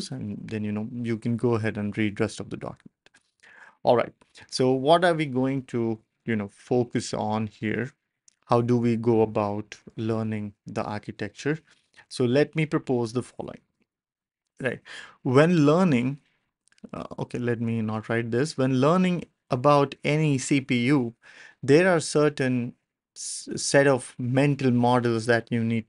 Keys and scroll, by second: 3.3 BackSpace, 4.2 ctrl+alt+super+p, 10.1 w, 11.3 ctrl+alt+super+p, 12.0 w.